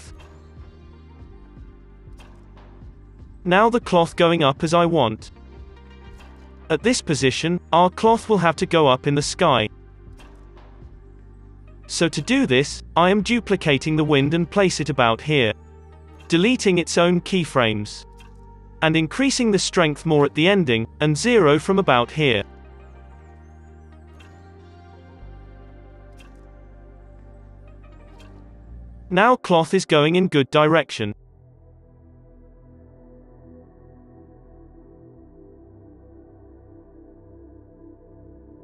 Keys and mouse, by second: 0.4 o, 0.4 i, 0.9 Down, 1.1 space, 3.8 space, 4.3 space, 9.5-10.9 space, 10.9 KP_1, 11.3 shift+d, 12.7 r, 13.3 r, 14.0-15.2 middle drag, 14.6 r, 15.3 KP_1, 16.3 a, 16.7 a, 17.4 Delete, 17.5 Delete, 18.5-19.6 middle drag, 20.2 i, 20.9-23.1 drag, 23.1 i, 23.7 space, 24.4 space, 26.0 space, 27.0 space, 27.2-30.3 middle drag, 27.4 space, 28.2 space, 28.4 space, 30.6 space, 30.7 middle click, 31.6 space, 32.6 space, 33.9 space, 34.4 space, 35.0 Down, 35.4 KP_3, 36.0 r, 37.7 i, 38.4 space.